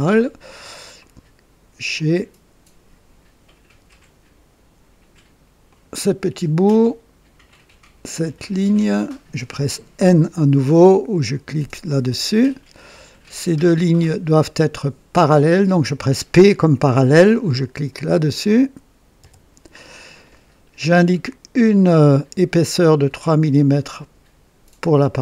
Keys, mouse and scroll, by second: 0.0-0.8 right drag, 0.9-1.8 right drag, 5.6 click, 8.3 click, 11.9 typing, 14.5 click, 15.9 click, 19.1 typing, 21.9 click, 23.5 click.